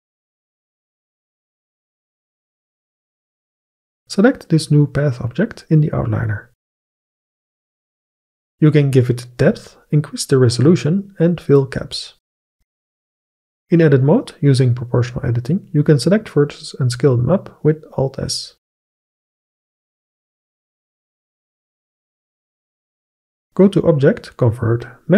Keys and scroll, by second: 13.7 Tab, 15.9 alt+s, 19.2 alt+s, 21.1 alt+s.